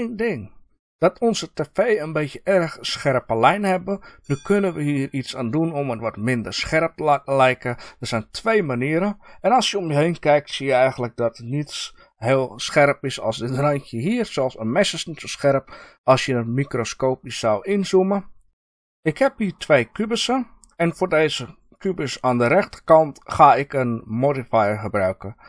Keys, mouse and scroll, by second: 7.6-21.7 middle drag, 21.7 click.